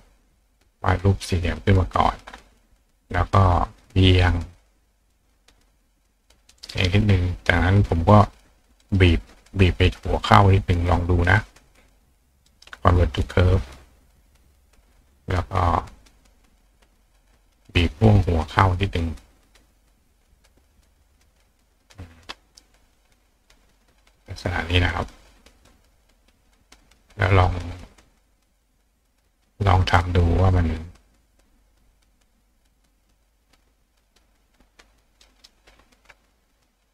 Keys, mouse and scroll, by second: 0.4-2.1 drag, 3.0 click, 3.7 click, 4.4 click, 5.7 click, 6.8 click, 8.8 right click, 10.1 click, 10.8 click, 12.5 right click, 13.8 click, 14.9 click, 16.0 click, 16.7 click, 17.2-17.6 drag, 18.9 click, 20.2-21.6 shift+drag, 22.9 click, 23.5 click, 24.2 click, 25.2 click, 26.6-35.2 drag, 35.4 right click.